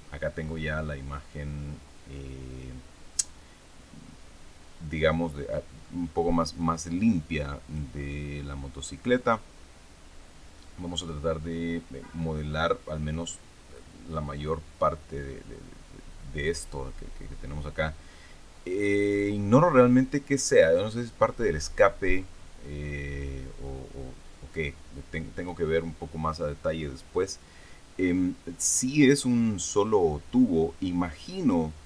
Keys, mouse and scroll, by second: 3.7-4.3 scroll down 2, 5.8 middle click, 5.8 click, 6.5 middle click, 6.6-7.9 drag, 8.0-11.0 scroll up 2, 18.7-19.5 scroll down 4, 19.9 scroll down 1, 20.7 click, 21.7-22.5 scroll up 3, 23.1-25.6 drag.